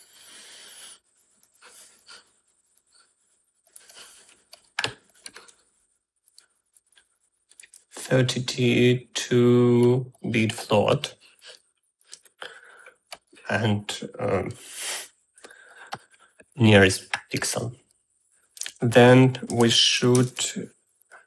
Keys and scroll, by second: 19.6-20.7 typing.